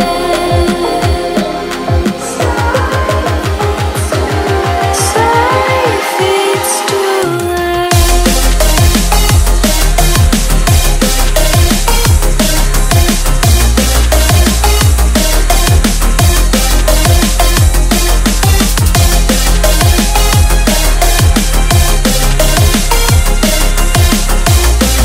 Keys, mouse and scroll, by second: 0.1 e, 0.7 r, 1.9-3.6 shift+middle drag, 3.6 e, 5.6 click, 6.1 click, 6.7 e, 7.3 r, 8.3 click, 8.4 s, 9.3 click, 9.4 s, 9.9 click, 10.3 e, 11.6 r, 12.7 shift+middle click, 13.2 e, 13.8 r, 14.9 click, 15.4 s, 16.3 click, 16.5 shift+middle click, 16.7-17.2 scroll down 1, 17.2 e, 18.2 r, 18.9 r, 19.7-21.5 shift+middle drag, 20.1 r, 23.7 r, 24.6 click, 24.9 s.